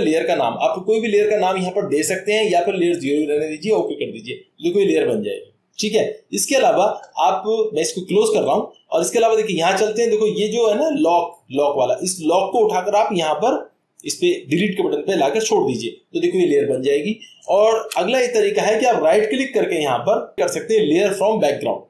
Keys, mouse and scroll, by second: 3.7 click, 6.5-7.7 drag, 8.5-9.6 drag, 17.4 click, 17.7 ctrl+z, 19.1 right click.